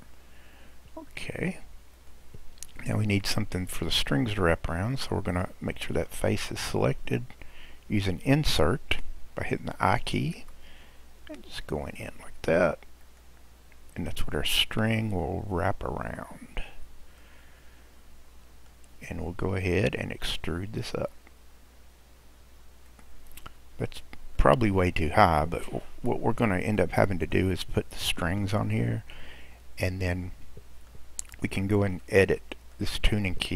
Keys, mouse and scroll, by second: 0.4-1.9 scroll down 2, 1.9 click, 3.5-5.3 scroll up 3, 5.3 click, 10.4 i, 17.2-20.4 middle drag, 21.0 e, 23.4-24.4 scroll down 3, 24.4-29.3 middle drag, 29.3-30.0 scroll up 2, 30.0-32.1 middle drag, 32.1 click.